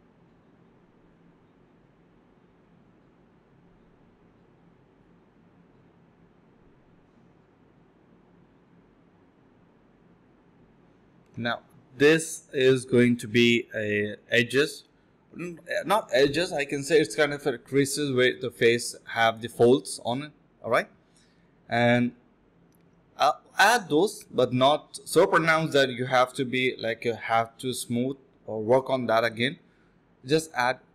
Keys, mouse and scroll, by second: 1.1 space, 1.3 space, 1.7 double click, 4.4 double click, 5.4 ctrl+z, 5.5 ctrl+z, 5.7 ctrl+z, 5.8 ctrl+z, 6.4 double click, 8.4 alt+click, 9.0 double click, 9.7 alt+click, 10.2 double click, 10.5 shift+click, 11.4 shift+click, 13.2 ctrl+b, 13.5 double click, 13.7 typing, 14.2 double click, 15.4 shift+click, 16.5 alt+click, 16.7 alt+click, 17.6 double click, 20.1 shift+click, 21.0 double click, 21.5 shift+click, 22.8 alt+click, 23.5 double click, 25.8 shift+click, 28.0 alt+click, 28.7 ctrl+z, 28.7 typing, 29.3 alt+click, 30.1 shift+click.